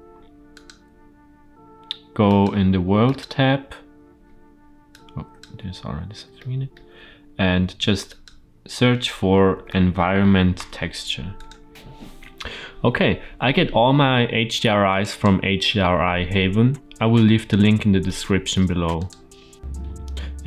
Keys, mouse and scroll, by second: 2.2-3.1 drag, 4.1-4.8 scroll down 1, 4.8-5.3 drag, 4.8-5.3 scroll down 2, 5.5 x, 6.3 middle click, 7.6 shift+a, 19.6 scroll down 2.